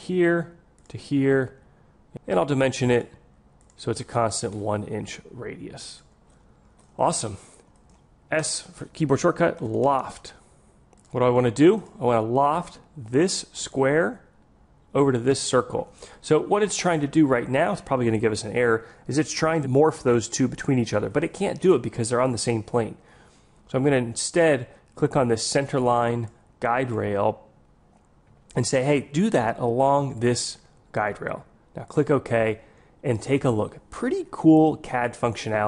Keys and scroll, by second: 8.4 s.